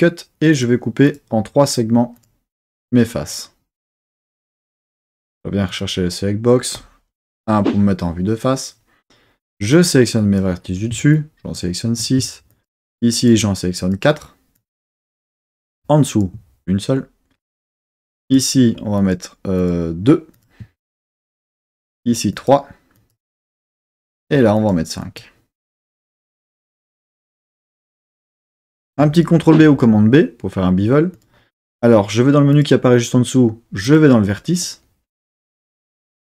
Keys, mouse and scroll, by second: 0.5 click, 1.0 click, 1.7 click, 2.1 click, 2.7 click, 3.2 click, 3.8 click, 4.2 click, 4.9 click, 5.7 click, 7.3 KP_1, 9.7 click, 11.1 shift+click, 12.5 shift+click, 13.1 shift+click, 13.8 shift+click, 14.6 shift+click, 16.1 shift+click, 18.2 shift+click, 19.0 shift+click, 19.6 shift+click, 20.3 shift+click, 21.9 shift+drag, 22.3 shift+click, 23.0 shift+click, 24.5 shift+click, 25.0 shift+drag, 25.6 shift+click, 26.4 shift+click, 27.3 shift+click, 29.4 super+b, 31.1 click, 32.5 click, 33.8 click.